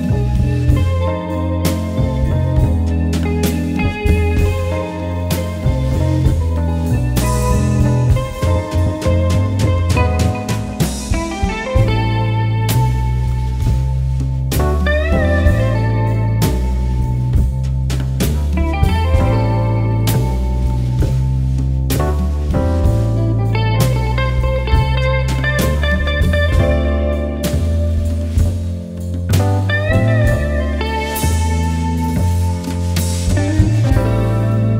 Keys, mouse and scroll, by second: 0.4-10.5 drag, 13.0 alt+scroll down 1, 13.8-14.2 alt+scroll up 1, 15.0-18.5 drag, 22.2-25.2 drag, 27.6 alt+scroll down 1, 28.0 alt+scroll up 1, 29.0-34.7 drag.